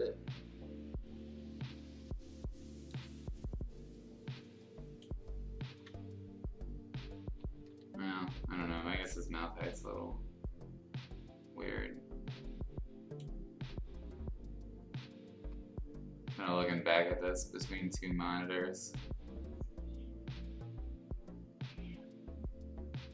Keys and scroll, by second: 5.7 ctrl+z.